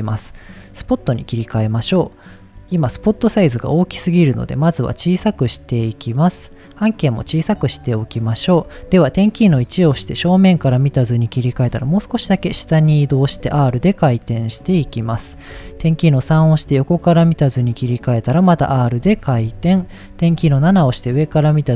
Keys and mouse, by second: 0.8 click, 3.3-5.9 drag, 7.1-8.3 drag, 9.5 KP_1, 11.6 g, 12.9 click, 13.2 r, 14.6 click, 15.5 KP_3, 16.3 r, 18.4 click, 19.2 shift+middle click, 20.4 KP_7, 21.5 shift+middle click.